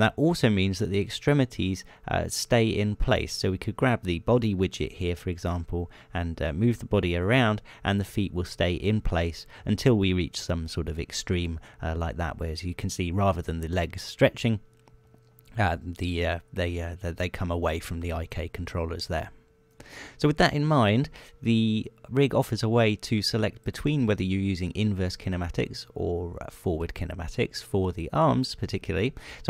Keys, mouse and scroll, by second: 3.7 right click, 5.5 g, 19.0 right click, 20.4 right click, 21.2 right click, 22.2 r, 24.4 click.